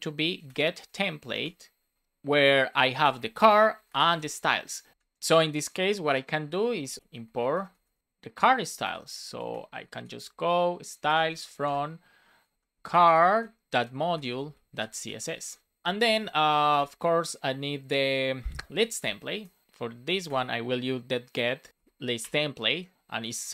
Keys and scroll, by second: 0.7 shift+t, 1.4 Return, 1.9 shift+9, 2.8 shift+c, 3.4 space, 4.9 super+Left, 6.4 super+Right, 6.8 Return, 7.0 BackSpace, 8.0 BackSpace, 8.0 space, 9.3 BackSpace, 10.5 space, 12.5 shift+Right, 12.8 shift+c, 15.4 super+s, 15.8 Down, 16.0 super+Right, 16.2 Return, 16.8 space, 17.9 space, 18.6 shift+l, 19.4 Return, 19.6 space, 21.7 shift+l, 22.2 Return, 22.7 shift+9.